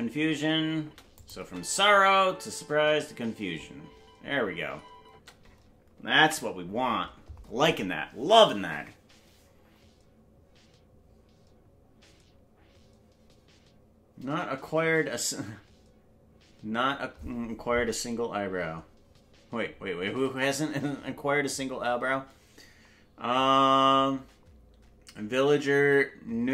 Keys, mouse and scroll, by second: 0.8 space, 1.1 click, 1.4 space, 5.1 space, 7.1 ctrl+space, 8.0 ctrl+s.